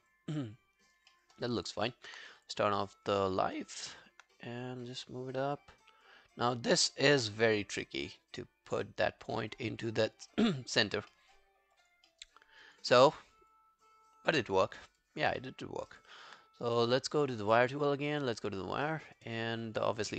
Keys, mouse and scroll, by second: 0.1 alt+click, 1.1 alt+middle click, 1.4 alt+right click, 1.6 alt+click, 3.3 alt+click, 9.8 alt+click, 10.3 alt+middle click, 10.6 alt+scroll down 1, 10.8 alt+click, 11.1 alt+middle click, 11.5 alt+scroll up 2, 11.8 alt+click, 12.1 alt+middle click, 12.4 alt+scroll up 2, 12.7 alt+click, 13.0 alt+middle click, 13.5 alt+click, 14.8 alt+scroll down 2, 15.1 alt+click, 15.4 alt+middle click, 15.7 alt+scroll down 1, 15.9 alt+click, 18.9 alt+middle click, 19.1 alt+right click, 19.3 alt+click.